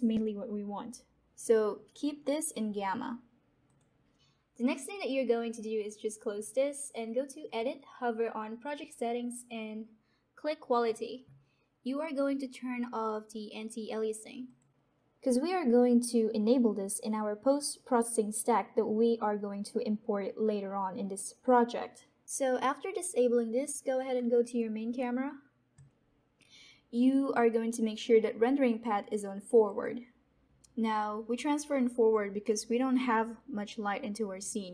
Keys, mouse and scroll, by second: 3.6 click, 25.8 click, 29.6 click.